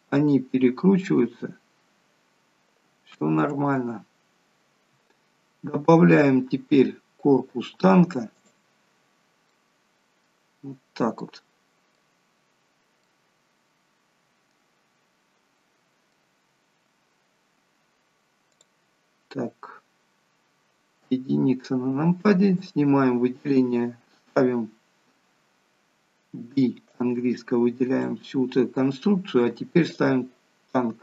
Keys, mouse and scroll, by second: 3.7 ctrl+z, 7.0 scroll down 2, 8.5 click, 8.5 scroll down 2, 9.5 middle click, 12.2-13.1 scroll up 2, 13.1 middle click, 16.4 scroll down 1, 18.5 click, 21.0 KP_1, 22.6 click, 26.3 b, 30.0 click.